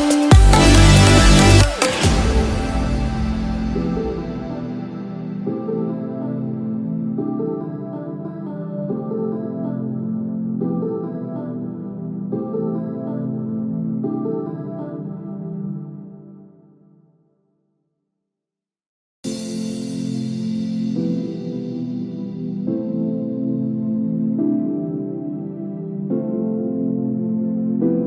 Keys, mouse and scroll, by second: 0.5 click, 4.0 click, 26.9 click.